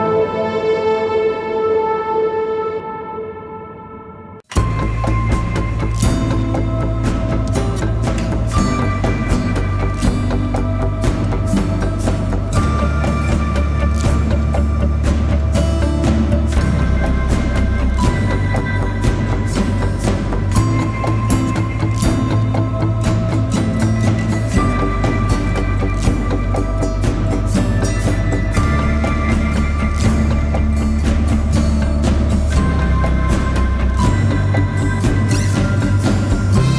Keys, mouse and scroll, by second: 15.9 double click, 22.1-22.5 typing, 25.2-26.0 typing, 31.9 typing.